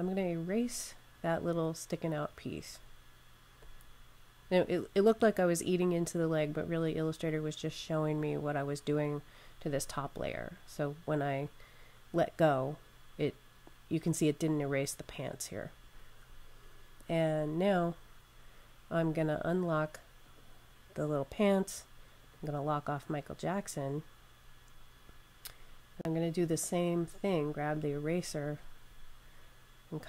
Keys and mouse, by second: 1.3 click, 17.7 click, 27.5 click, 29.6 click.